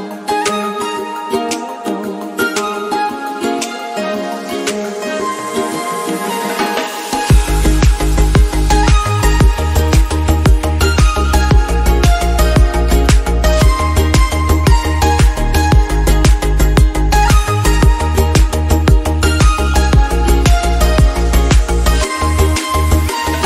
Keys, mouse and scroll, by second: 0.3-1.1 drag, 1.1 middle drag, 1.3 scroll up 2, 1.5-3.0 middle drag, 1.9 drag, 2.5-3.0 drag, 4.6 click, 4.8 click, 6.3 click, 6.5-8.7 middle drag, 8.7-10.0 drag, 10.0 KP_0, 11.3 click, 11.5 click, 13.1 click, 18.0 click, 18.5 scroll down 2, 18.7-20.3 middle drag, 19.0-23.4 drag.